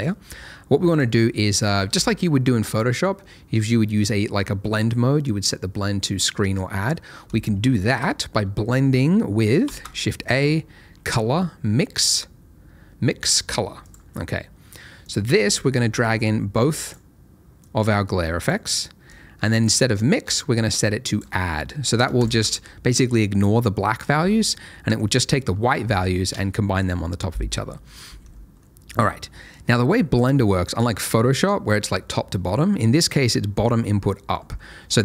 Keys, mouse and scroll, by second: 0.1-0.8 scroll up 1, 0.8 click, 9.6 shift+a, 13.8 click, 22.6 ctrl+shift+click, 24.5 middle click, 28.2-28.6 scroll up 1, 28.6 middle click, 29.0-30.1 scroll down 1, 30.1 click, 34.5-34.8 scroll up 1, 34.8 middle click.